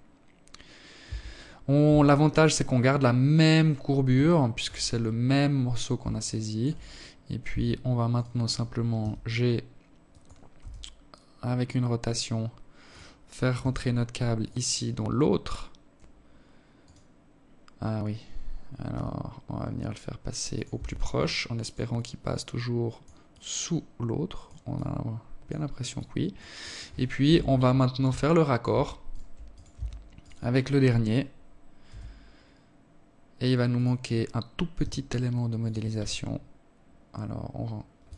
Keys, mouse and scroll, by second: 0.2 Tab, 2.7 alt+shift+click, 3.2-4.2 scroll up 1, 4.2 scroll up 1, 4.6 alt+shift+click, 5.5 scroll up 1, 5.9 Tab, 6.6 right click, 7.4 g, 9.0 r, 12.0 g, 15.2 right click, 17.3 g, 19.1 Tab, 19.6 alt+click, 20.3 alt+click, 21.7 alt+click, 23.2 alt+click, 24.4 alt+click, 25.0 alt+click, 25.6 KP_7, 26.6 alt+shift+click, 27.5 right click, 27.9 right click, 28.1 Tab, 28.6 right click, 30.3 r, 33.2 g, 34.4 s, 37.2 right click, 37.6 s.